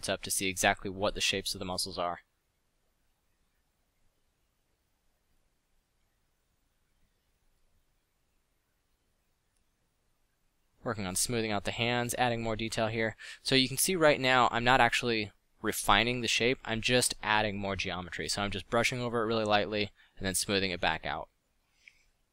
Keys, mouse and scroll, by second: 0.3 f, 17.2 middle click.